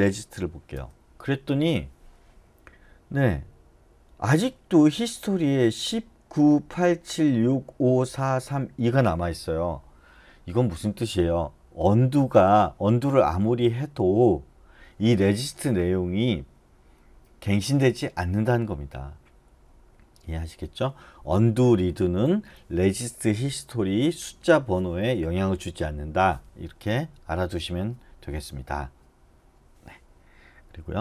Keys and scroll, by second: 0.0-0.6 typing, 0.8 Return.